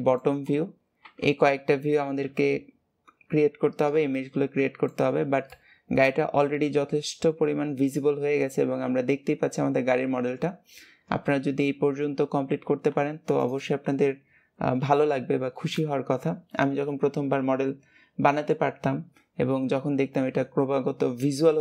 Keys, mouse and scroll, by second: 2.2 KP_7, 4.1 middle click, 5.0 Tab, 5.4-8.5 middle drag.